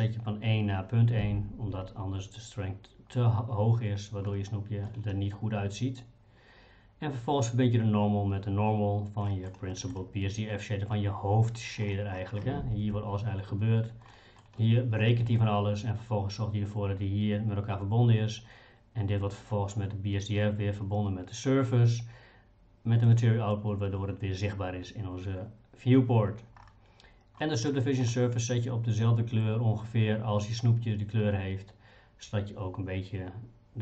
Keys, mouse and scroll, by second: 4.3 middle click, 9.3 middle click, 9.7 middle click, 14.1 middle click, 23.0 click, 27.4 middle click.